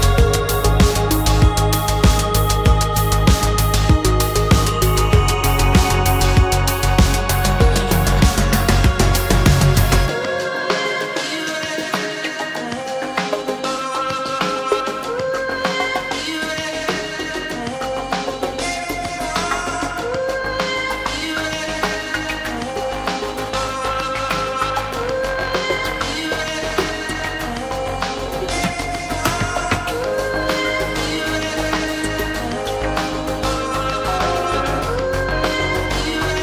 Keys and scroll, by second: 2.4 shift+j, 8.5 alt+shift+f, 9.1 shift+z, 9.6 shift+a, 10.6 space, 14.4 m, 16.1 shift+space, 16.1 Escape, 17.7 shift+a.